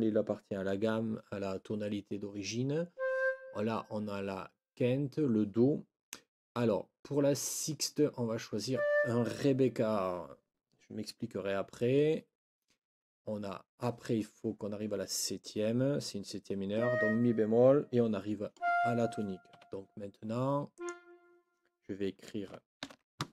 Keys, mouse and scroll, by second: 19.5 Escape, 20.7 click, 22.8 ctrl+l.